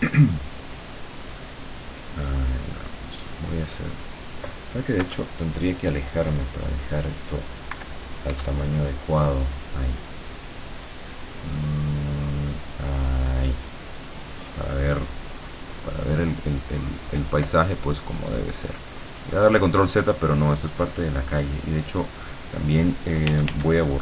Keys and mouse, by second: 0.5 click, 2.8 click, 3.6 middle click, 3.8 click, 5.0 KP_Subtract, 5.8-7.8 drag, 7.8 KP_Subtract, 8.4 KP_Add, 9.2-12.7 drag, 15.0-17.2 drag, 17.8-19.9 drag, 20.8-23.1 drag, 23.4 f, 23.8-24.0 drag.